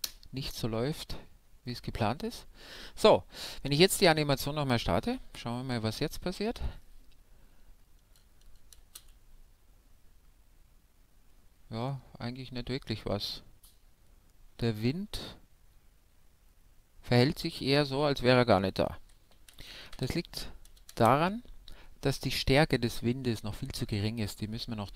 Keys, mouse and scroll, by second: 0.0 KP_Enter, 1.6-4.5 middle drag, 3.8 alt+a, 9.0 shift+space, 10.4-12.3 middle drag, 19.3 alt+a, 20.0 shift+Left, 20.9 shift+space.